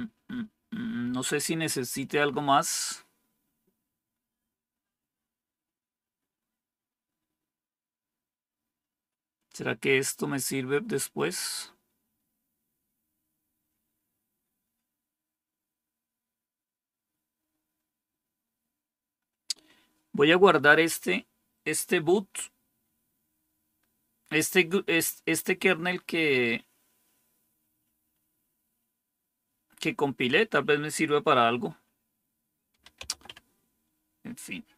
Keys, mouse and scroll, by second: 32.6-33.7 typing.